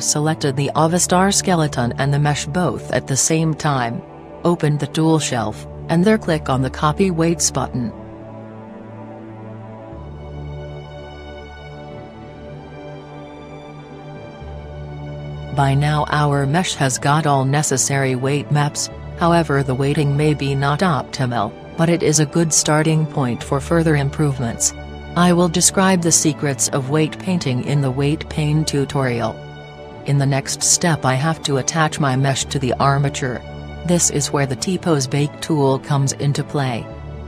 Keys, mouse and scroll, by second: 5.3-8.5 drag, 13.9-15.6 drag, 23.0-24.6 middle drag, 26.6 KP_1, 28.1 KP_1.